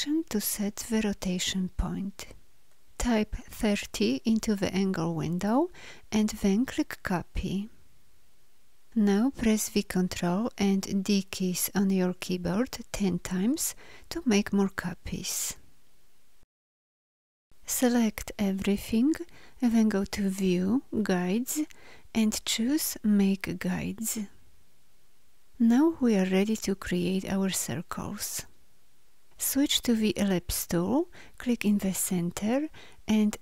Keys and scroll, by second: 9.9 ctrl+d, 17.9 ctrl+a, 29.6 l.